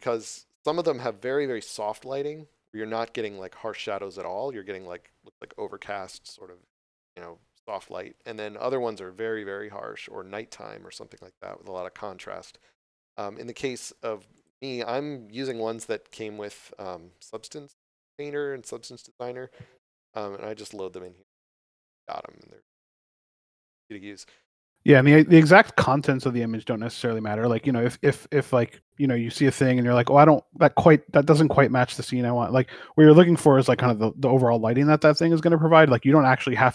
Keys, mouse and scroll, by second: 14.2 click, 20.8 click, 23.6 click, 26.4 scroll down 1, 27.1 click.